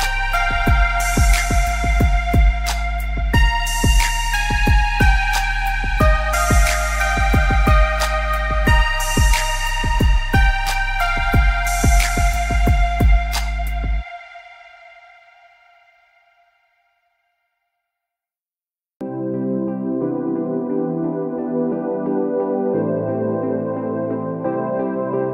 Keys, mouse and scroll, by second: 0.0 scroll up 1, 0.2 click, 0.5 shift+click, 1.2 alt+scroll down 1, 1.5 click, 2.0 scroll up 1, 2.7 click, 3.6 scroll up 1, 4.2 click, 5.9 click, 12.4 click, 14.0 click, 14.4 alt+scroll down 1, 14.6 space, 14.9 alt+scroll up 2, 15.2 click, 15.7 alt+scroll down 2, 15.9 click, 16.0 space, 16.3 click, 16.6 alt+scroll down 1, 16.9 click, 17.2 alt+scroll down 1, 17.3 space, 18.1 alt+scroll up 1, 18.3 space, 19.0 alt+scroll up 1, 19.3 alt+scroll down 1, 20.0 alt+scroll down 1, 20.1 space, 21.1 alt+scroll up 2, 21.5 click, 23.3 click, 25.2-25.3 alt+scroll up 2.